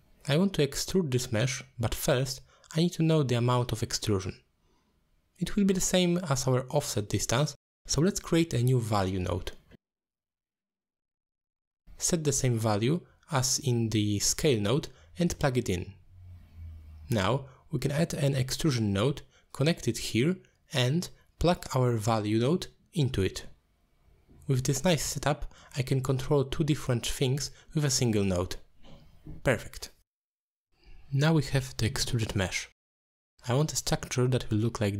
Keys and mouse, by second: 0.6-3.9 drag, 4.0 click, 4.8 middle click, 6.6 shift+a, 10.5 click, 11.6 click, 13.2 middle click, 13.7-14.5 drag, 15.1 middle click, 16.1-19.2 drag, 19.4 middle drag, 20.4-21.7 drag, 22.6 middle click, 23.2 alt+shift+click, 24.2 middle click, 25.9-26.5 drag, 26.7 click, 27.3 click, 27.6 shift+click, 28.1 g, 29.7 g, 30.5 click, 31.0-32.1 middle drag, 32.7 middle click, 33.5-34.7 drag.